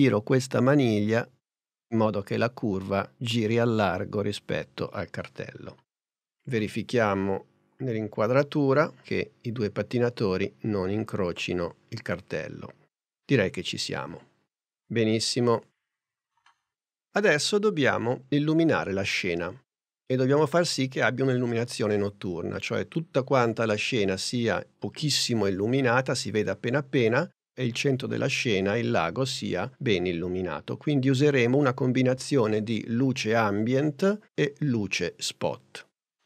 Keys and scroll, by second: 19.8 super+Tab.